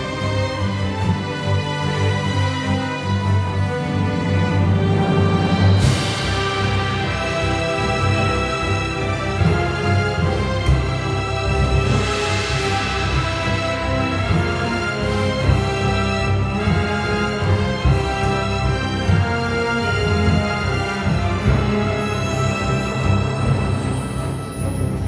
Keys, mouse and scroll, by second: 0.3 click, 3.0 b, 3.0 ctrl+z, 5.1 ctrl+z, 14.0 ctrl+z, 15.6 ctrl+z, 16.2 ctrl+z, 18.0 ctrl+z, 18.2 ctrl+z.